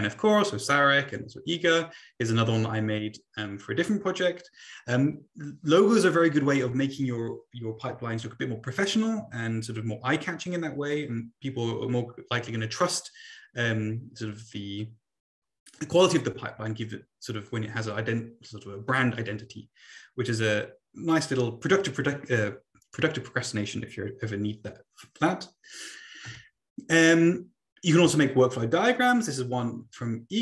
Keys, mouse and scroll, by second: 26.2 Right.